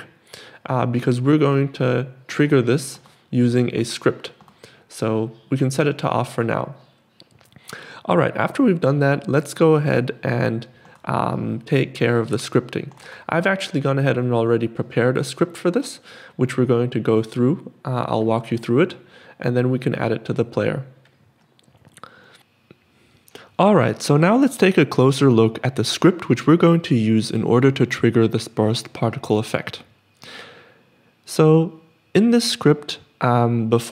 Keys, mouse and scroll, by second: 14.4 click.